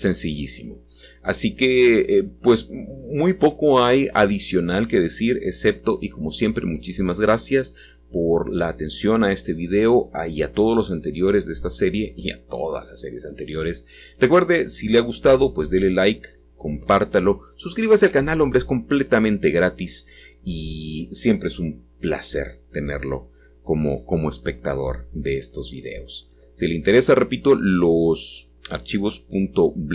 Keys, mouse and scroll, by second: 2.7 KP_1, 18.5-20.8 drag, 26.5-29.4 scroll down 1.